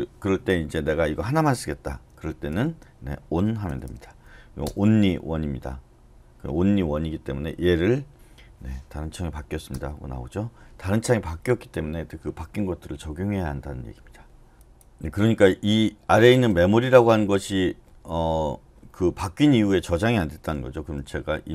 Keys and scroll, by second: 3.4-4.3 typing, 4.6 Return, 7.9-8.6 typing, 9.7 Return, 21.0-21.5 typing.